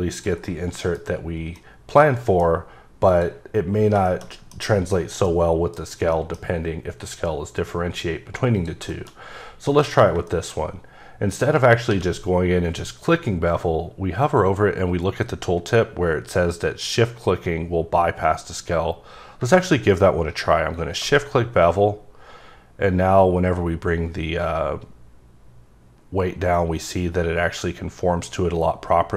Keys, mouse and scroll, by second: 0.1 click, 0.4 middle click, 1.5 middle click, 2.4 scroll up 2, 3.1 click, 3.8 scroll down 1, 4.0 shift+middle click, 5.2 middle click, 5.8 scroll down 1, 6.1 middle click, 8.5 click, 8.9 shift+middle click, 9.1 scroll up 1, 9.7 click, 10.2 middle click, 10.6-11.8 scroll up 2, 11.9 q, 19.3 shift+Num_Lock, 20.7 shift+click.